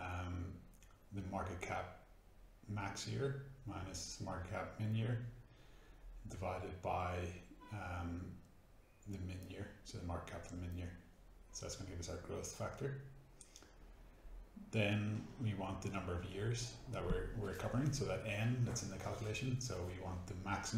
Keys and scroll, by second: 0.0-1.0 typing, 1.2 Up, 1.3 Tab, 3.2 ,, 3.2 space, 5.0-5.9 typing, 6.1 Up, 6.6 Tab, 7.0-8.0 typing, 8.7 shift+Return, 9.4-14.0 typing, 15.4-20.6 typing, 18.0 Tab.